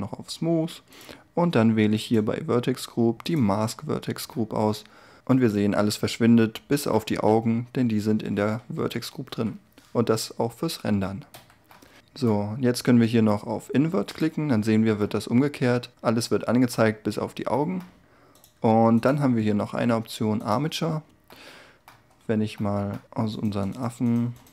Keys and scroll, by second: 7.6 q, 7.8 0, 9.2 F12, 11.3 Escape, 21.4 Tab.